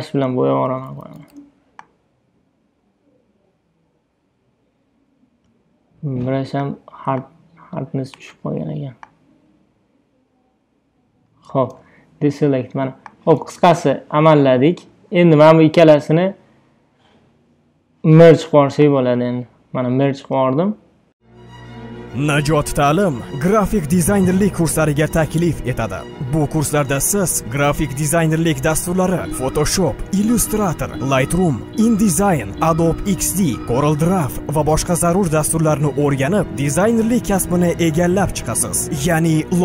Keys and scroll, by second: 0.7 ], 8.2 Return, 11.8 super+d.